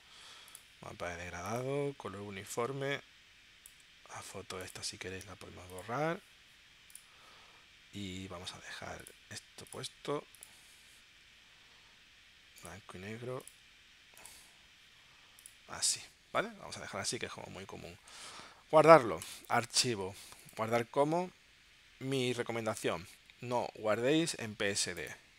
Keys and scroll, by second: 19.2 super+p.